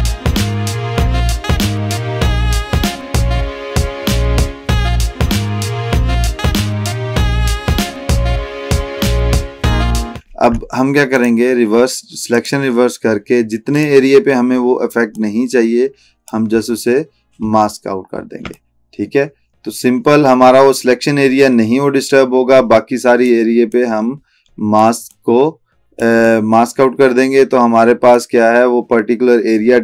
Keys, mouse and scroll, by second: 0.1 space, 0.4 alt+scroll up 1, 0.4 drag, 2.0 alt+scroll down 1, 2.1 click, 2.3 space, 2.4 alt+click, 2.8 ctrl+click, 3.5 ctrl+space, 3.7 alt+click, 4.6 alt+click, 5.5 alt+scroll up 1, 5.6 drag, 6.2-7.2 typing, 7.6 alt+drag, 9.4 alt+click, 9.6-10.1 alt+scroll down 1, 11.2 right click, 12.4-16.5 drag, 16.6-17.0 scroll up 1, 17.6 alt+scroll down 1, 18.6-23.6 alt+drag, 24.1-25.1 click, 25.5-26.1 click, 26.6-28.5 drag.